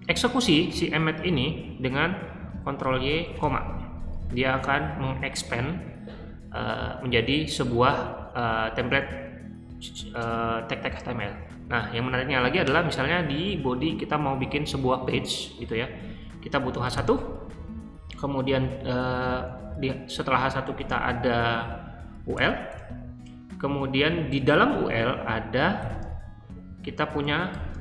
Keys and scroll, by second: 2.7 ctrl+y, 3.3 ,, 16.5-17.4 typing, 22.3-22.6 typing, 25.7 >, 27.4-27.8 typing.